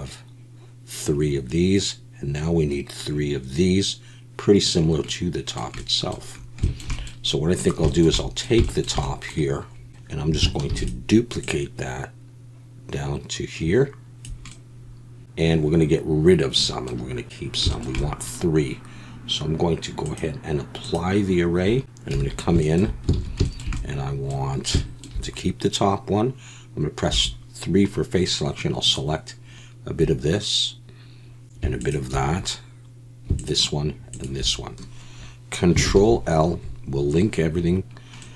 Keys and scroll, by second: 10.7 shift+d, 22.1 Tab, 23.1 alt+a, 27.2 3, 35.9 ctrl+l.